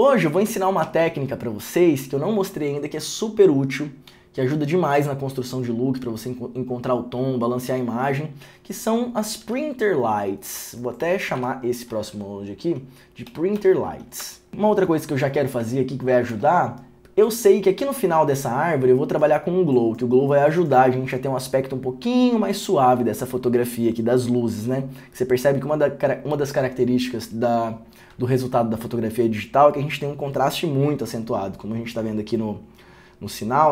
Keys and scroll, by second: 9.4 Return, 9.5 alt+s, 11.5 Tab, 13.4 p, 14.3 Return, 16.4 alt+s.